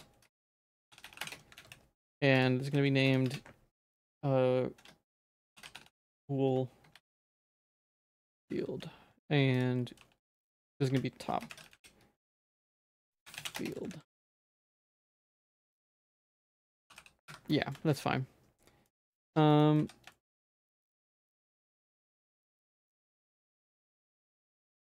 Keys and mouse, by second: 1.0 o, 1.6 ctrl+s, 2.4 click, 2.7 g, 3.2 F2, 5.9 o, 8.5 ctrl+s, 10.0 g, 10.9 F2, 13.9 ctrl+s, 16.0 F2, 17.8 ctrl+s, 18.9 middle click, 19.3 Tab, 19.5 middle click, 19.8 a, 20.1 shift+middle click, 20.4 shift+middle click, 21.0 2, 21.5 shift+middle click, 21.9 middle click, 22.4 ctrl+s, 22.6 middle click, 23.3 shift+middle click, 24.3 a.